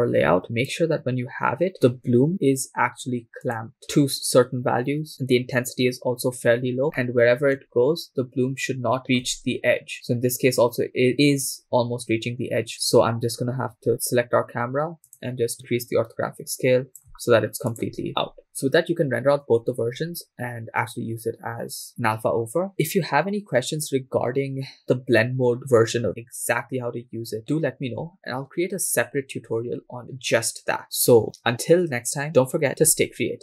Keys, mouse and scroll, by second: 0.8-1.4 scroll down 4, 1.4 click, 3.5 click, 4.0-4.6 scroll up 2, 6.8 scroll up 5, 7.5 shift+middle click, 7.7-9.0 scroll up 5, 9.0-9.4 shift+middle drag, 9.5-10.2 scroll down 2, 10.2 scroll down 1, 12.0-13.4 scroll down 3, 13.4-13.9 scroll down 1, 13.9 click, 13.9 right click, 15.1-17.5 drag, 17.7 click, 18.1 scroll up 2, 18.4-18.9 scroll down 2.